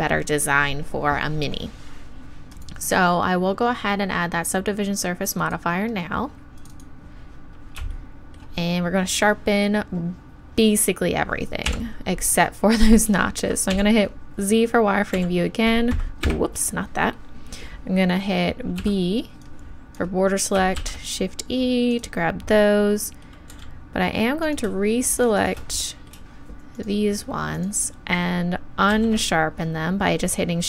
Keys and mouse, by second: 2.5-5.6 drag, 6.6-11.7 drag, 11.7 KP_1, 13.7 z, 15.1 v, 18.8 b, 20.8 shift+e, 23.5 z, 24.4-28.9 drag, 28.9 shift+e.